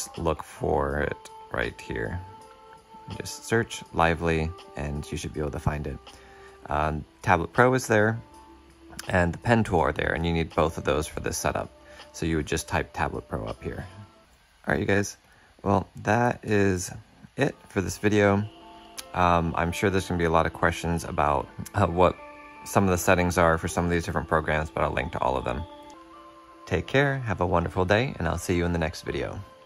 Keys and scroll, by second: 14.2 shift+super+\, 21.5 shift+super+q.